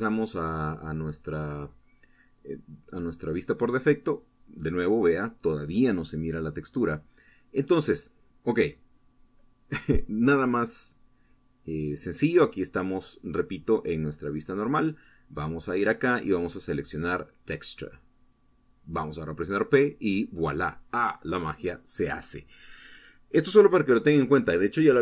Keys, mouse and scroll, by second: 0.0-0.4 scroll up 2, 1.9 p, 5.4 Escape, 12.3 scroll up 1, 14.3 click, 15.6 click, 18.4 p, 21.0 Down.